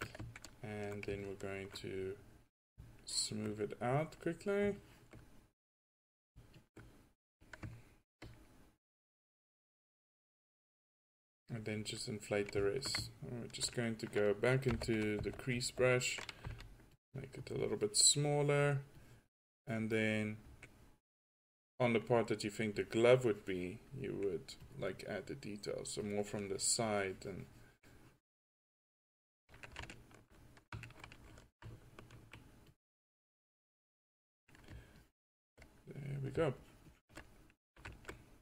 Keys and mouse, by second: 4.3 click, 5.7 drag, 7.4 click, 14.8 6, 15.3 5, 15.6 4, 16.5 f, 34.2-35.1 middle drag, 35.8 middle drag, 37.4-37.7 middle drag.